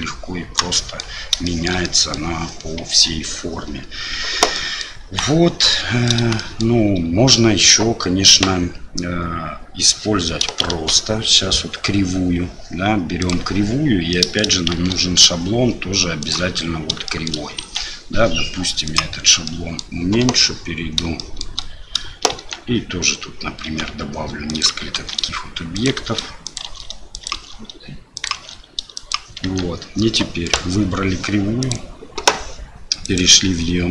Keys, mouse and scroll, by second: 0.7 middle click, 1.4 shift+middle click, 1.8 middle click, 2.9 Tab, 4.5-4.8 middle drag, 5.1 Delete, 5.7 middle drag, 5.9 click, 6.4 shift+drag, 10.7 shift+a, 14.1 middle drag, 14.7 shift+a, 17.1 shift+middle drag, 17.6 s, 19.4-19.8 middle drag, 20.2 KP_7, 21.2 shift+middle drag, 22.4 Tab, 23.7 s, 25.0 shift+d, 26.0 shift+d, 26.7 shift+d, 27.5 shift+d, 29.4 Tab, 30.5 click, 31.7-32.4 drag, 33.1 click.